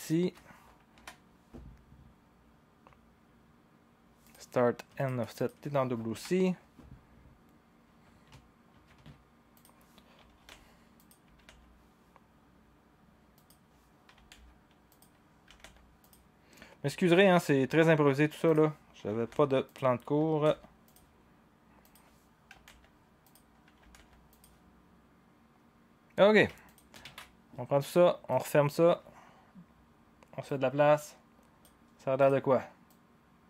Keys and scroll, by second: 0.9 Delete, 10.2-11.9 typing, 14.1 typing, 15.5-15.8 typing, 19.1 5, 20.4 typing, 22.5 typing, 23.7-24.1 typing, 27.0 ctrl+a.